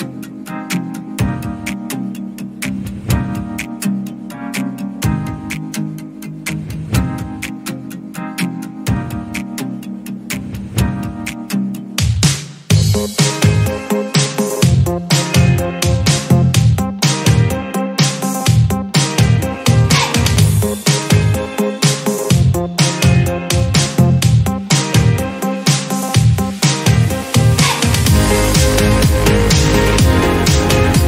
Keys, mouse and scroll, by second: 0.6 click, 0.9 click, 1.1-2.9 scroll up 4, 1.4 shift+middle drag, 2.9-4.6 shift+drag, 5.9 ctrl+click, 6.9-8.5 drag, 9.8 ctrl+z, 10.4-10.9 scroll up 1, 10.9-12.6 drag, 13.0-14.6 drag, 14.9 click, 15.1-15.8 scroll down 17, 15.8 alt+z, 16.6 click, 16.8 click, 17.0-17.6 scroll up 1, 17.6-18.2 scroll up 9, 17.6 drag, 18.2-18.8 shift+middle drag, 19.0-19.5 scroll down 8, 19.5 shift+middle click, 20.1-20.7 drag, 20.7-21.9 scroll up 6, 21.9 click, 22.6 click, 23.3-24.3 scroll up 10, 23.6 shift+middle click, 24.3-24.8 shift+middle drag, 24.8-25.2 scroll down 1, 25.2-26.1 scroll up 1, 26.1-26.7 scroll down 4, 26.7-27.9 scroll up 3, 27.9 click, 28.1-28.7 scroll up 1, 28.7-31.0 drag.